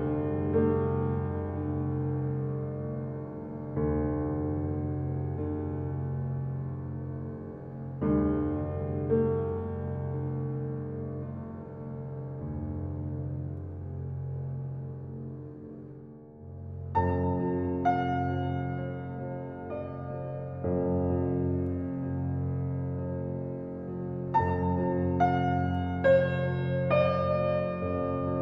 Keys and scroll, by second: 1.1 0, 5.0 space, 10.0 space, 13.9 t, 14.8 e, 15.0 t, 15.7 Return, 19.8 f, 21.0 Return, 25.1 e, 25.2 a, 25.4 s, 26.1 Return.